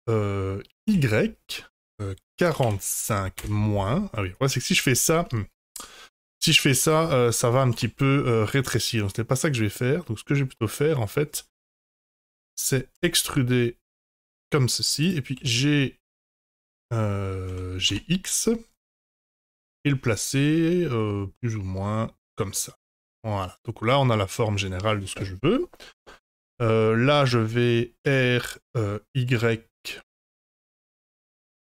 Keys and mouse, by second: 5.2 middle click, 6.4 middle click, 7.7 ctrl+z, 8.0 middle click, 11.7 KP_1, 12.9 e, 15.3 g, 22.5-24.4 middle drag, 25.2 middle click, 26.8 middle click, 28.0 r.